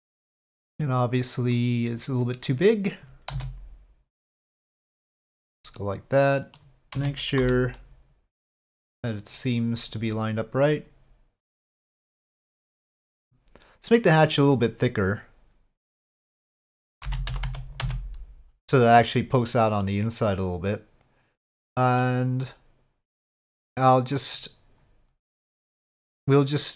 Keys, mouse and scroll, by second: 1.6-2.7 right drag, 2.7 click, 3.3 s, 5.6-6.6 middle drag, 7.0 z, 7.8 middle click, 9.8 click, 10.8-12.8 drag, 12.8-14.2 middle drag, 16.2-18.7 drag, 19.8-22.0 middle drag, 24.3-26.7 drag.